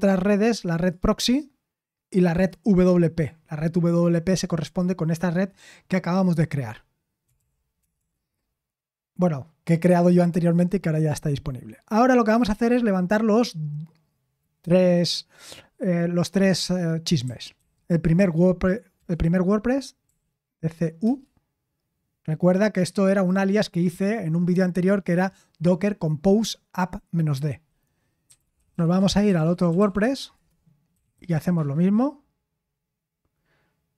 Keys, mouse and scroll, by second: 4.5-5.2 typing, 29.0-30.5 typing, 31.5 typing.